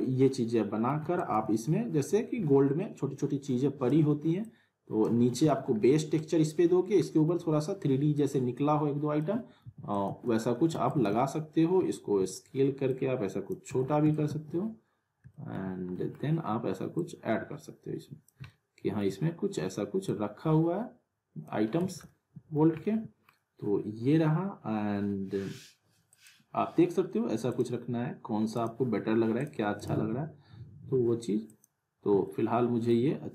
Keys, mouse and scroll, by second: 1.0 alt+w, 1.1 alt+right click, 1.3 alt+w, 1.8-3.1 scroll down 1, 3.1-4.1 drag, 5.1 alt+w, 5.3 alt+right click, 5.4 alt+w, 5.8-6.4 alt+middle click, 6.8 scroll down 1, 7.0 alt+middle click, 8.1-9.4 drag, 9.6 alt+w, 9.9 alt+right click, 10.1 alt+w, 10.9 alt+right click, 12.2 r, 12.9-13.5 click, 13.7 w, 14.1 alt+right click, 14.3 alt+w, 15.3 alt+middle click, 16.1-17.0 scroll up 1, 17.0-19.1 drag, 18.5-20.1 alt+middle drag, 20.1-21.6 drag, 21.8 z, 22.1-22.7 alt+middle click, 22.5 scroll down 1, 22.8-23.4 alt+middle drag, 26.1 click, 32.3-32.9 middle drag.